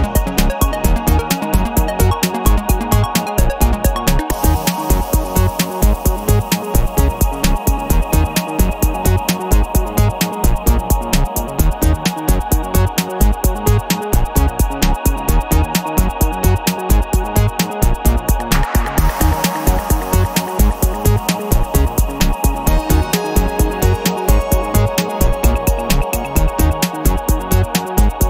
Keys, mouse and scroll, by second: 1.2 click, 3.1 click, 4.6-6.2 drag, 6.7 click, 7.1 click, 8.7 click, 10.0 click, 11.2-14.2 drag, 14.9 click, 15.3 click, 16.4 click, 17.5 click, 18.1 click, 19.3-21.7 drag, 21.8 click, 22.8 click, 23.5-26.7 middle drag, 26.7 0, 28.1 click.